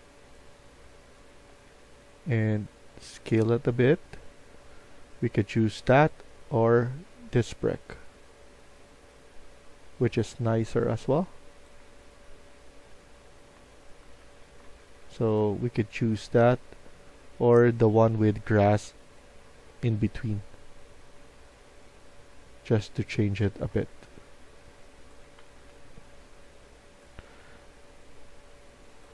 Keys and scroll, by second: 0.7-2.0 typing, 11.8-15.7 typing, 23.0-26.7 typing.